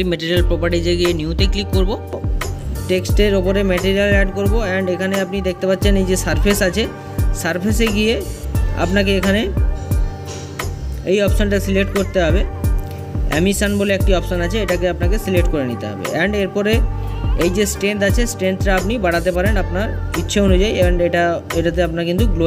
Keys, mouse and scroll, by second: 2.5 click, 14.5-22.4 drag.